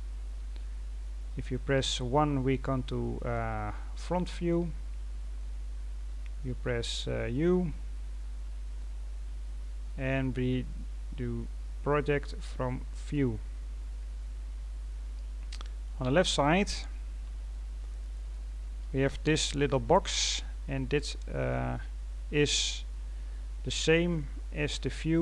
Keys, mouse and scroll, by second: 1.7 KP_1, 2.8-3.3 scroll down 2, 3.3-6.3 scroll up 1, 6.3 scroll up 1.